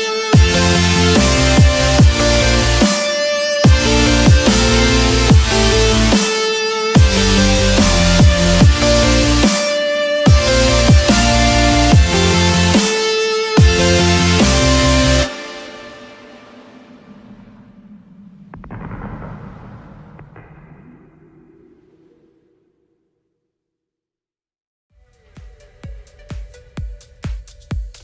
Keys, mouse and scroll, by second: 2.3 Return, 8.0 click, 9.1 middle click, 10.2 middle click, 10.6 middle click, 13.7 click, 14.0 scroll up 1, 18.1-18.9 scroll up 4, 19.3-19.7 scroll up 2, 21.8 click, 23.6 shift+click, 26.4 shift+click, 27.9 click.